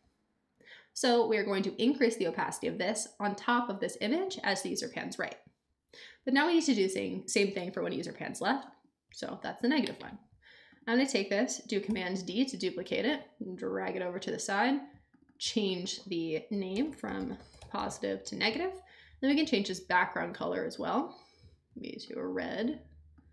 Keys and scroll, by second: 11.9 super+d, 16.5-18.3 typing.